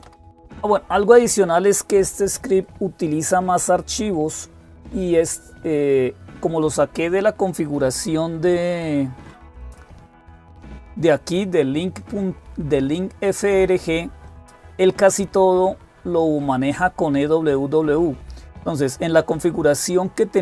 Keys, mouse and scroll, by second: 9.5 click, 13.4-14.6 scroll down 1, 18.1-18.7 scroll down 1, 18.7-19.3 scroll down 1, 19.3-20.4 scroll up 1.